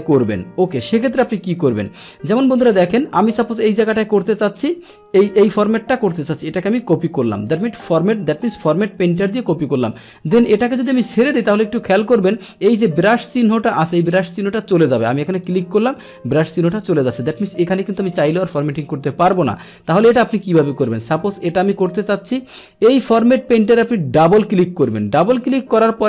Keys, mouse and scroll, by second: 1.8 click, 2.7 click, 3.6 click, 5.2 click, 6.7 click, 15.5 click, 17.7 click, 21.4 click, 24.2 click, 24.3 click.